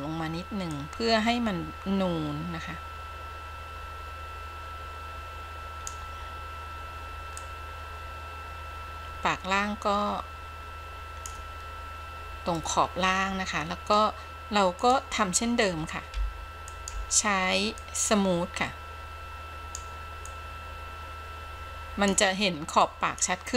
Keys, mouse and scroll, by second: 0.8-6.1 drag, 7.5-11.5 drag, 12.7-14.1 middle drag, 14.9 click, 16.2 f, 16.9 f, 17.9-20.0 drag, 20.4-22.4 drag, 23.0 click.